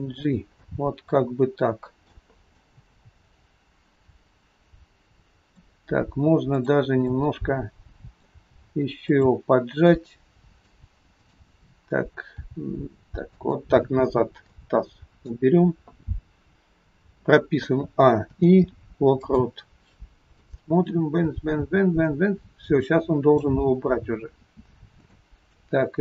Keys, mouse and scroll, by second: 0.6 middle click, 6.7 click, 7.2 middle click, 8.3 g, 9.9 middle click, 11.3 click, 12.4 g, 14.0 scroll up 1, 14.5 shift+middle click, 17.6 a, 18.3 i, 20.4 click, 24.2-24.8 scroll down 3, 24.9-25.3 scroll down 2, 25.3 shift+middle click.